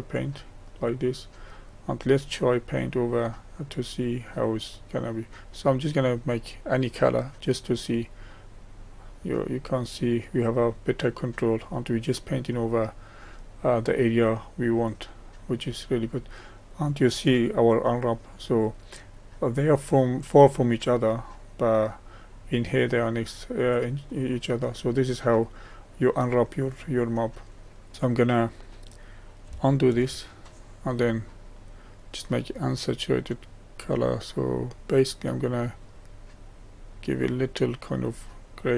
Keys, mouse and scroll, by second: 0.2 click, 1.4-3.1 middle drag, 3.1-4.0 scroll up 1, 4.0 scroll down 1, 5.9-10.8 drag, 29.9 ctrl+z, 31.6-35.8 drag.